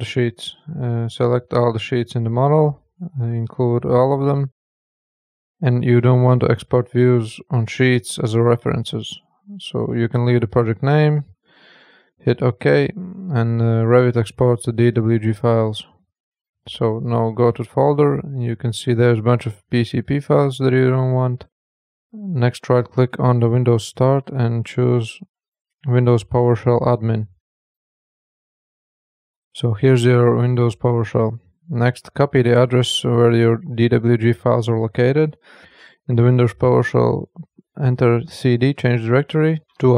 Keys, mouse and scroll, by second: 0.5 click, 2.5 scroll down 5, 4.5 click, 6.1 click, 9.0 click, 12.0 click, 16.0 click, 19.0 click, 20.8 Delete, 22.1 click, 23.7 click, 23.9 right click, 27.5 click, 32.3 click, 32.5 right click, 33.8 click.